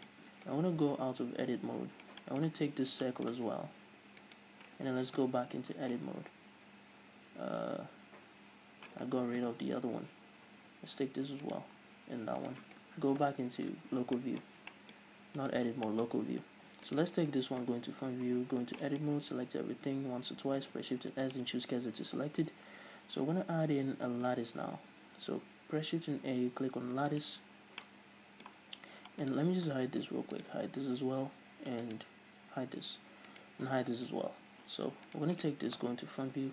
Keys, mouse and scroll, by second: 1.4 KP_Divide, 2.6-3.2 scroll up 2, 4.4 shift+right click, 5.4 KP_Divide, 6.2-6.6 scroll up 1, 6.6-7.0 scroll down 1, 7.1 scroll up 1, 9.6 KP_Divide, 10.8 scroll down 1, 11.6 shift+right click, 12.6 shift+right click, 13.4 KP_Divide, 14.0 scroll up 1, 14.3-15.7 middle drag, 15.7 right click, 16.0-17.1 shift+middle drag, 17.1 right click, 17.8 KP_1, 18.6 Tab, 18.7 scroll up 1, 19.0-20.3 shift+middle drag, 19.4 a, 20.3 scroll up 1, 20.8 shift+s, 21.8-22.3 scroll up 1, 22.3 Tab, 22.8 scroll down 1, 24.4 shift+a, 27.4-29.4 middle drag, 28.8-29.4 scroll down 2, 29.4 right click, 30.2 h, 30.5 right click, 30.7 h, 32.0 right click, 32.7 h, 33.5 right click, 34.3 h, 35.2 right click, 36.0 KP_1.